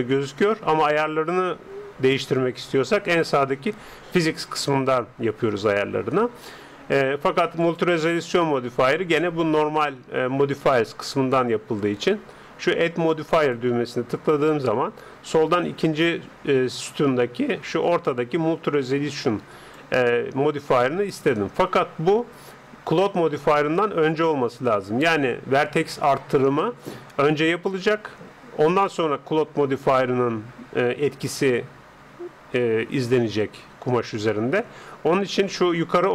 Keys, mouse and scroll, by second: 3.0-4.9 drag, 7.6-9.4 drag, 13.4-15.2 drag.